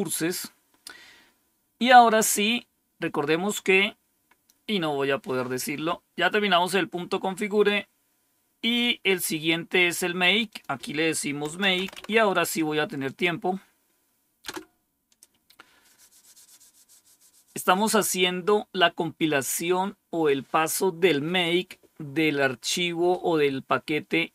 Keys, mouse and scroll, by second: 4.5-4.9 scroll down 2, 5.7-6.7 scroll down 5, 7.1-9.8 scroll down 4, 10.4 click, 11.1-12.4 typing, 14.4 Return.